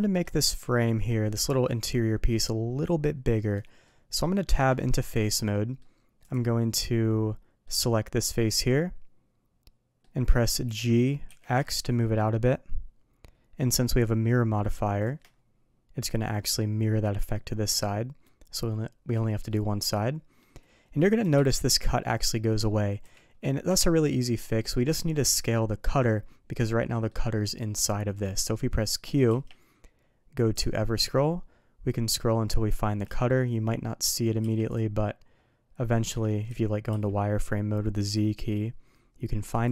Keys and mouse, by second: 0.0 middle drag, 0.6 middle click, 1.2 middle click, 3.6 middle drag, 4.4 Tab, 5.5 middle click, 6.2 click, 6.8-7.6 middle drag, 8.5-10.0 middle drag, 10.6 g, 16.0 click, 17.0 middle drag, 17.7-18.2 middle drag, 18.7-19.1 middle drag, 19.5-20.4 middle drag, 21.2 g, 23.7 Tab, 24.1-24.7 middle drag, 26.9 middle drag, 28.2 middle drag, 29.3 q, 33.3-34.2 middle drag, 34.4 q, 36.2 middle drag, 36.4 z, 36.9 q.